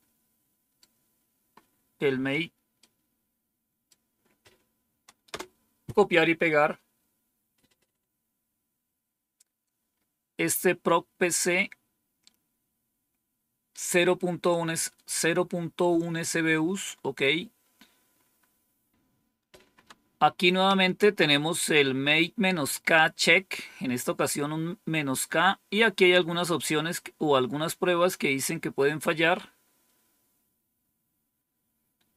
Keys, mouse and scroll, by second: 2.7-3.8 right drag, 5.2 Return, 9.8-10.8 scroll up 2, 10.8-14.1 scroll up 1, 14.1-14.9 scroll down 2, 16.7-17.4 scroll down 2, 17.6-18.9 scroll down 3.